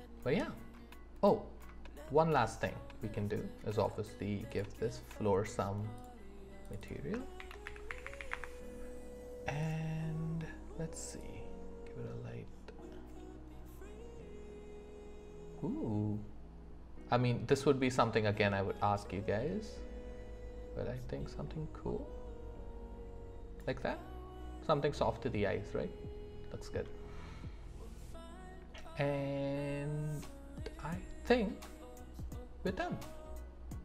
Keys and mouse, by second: 7.7-33.8 drag.